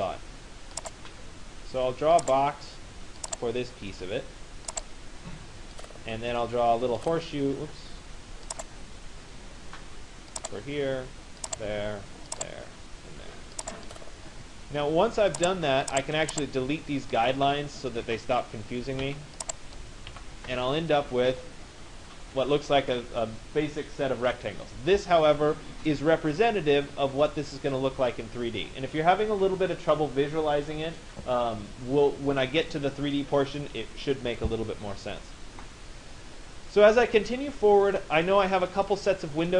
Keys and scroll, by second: 18.6 Delete.